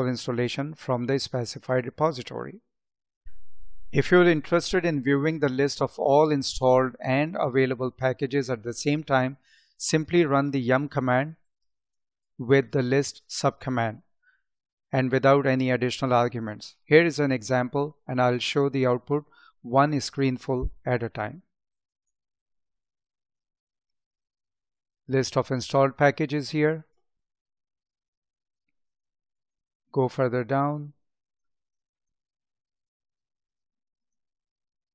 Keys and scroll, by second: 11.8 space, 27.3 space, 28.8 space, 31.9 space.